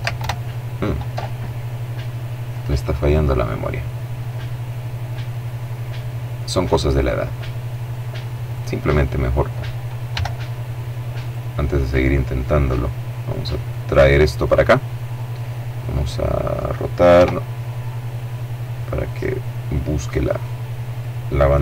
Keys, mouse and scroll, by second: 1.8 click, 3.2-4.0 scroll down 1, 4.0-4.4 scroll up 1, 4.4-5.2 scroll down 1, 5.2 middle click, 7.8 right click, 9.4 g, 10.5 click, 10.8 middle click, 13.0-14.2 drag, 14.0 middle click, 15.1 middle click, 16.4 r, 18.4 click, 21.1 r.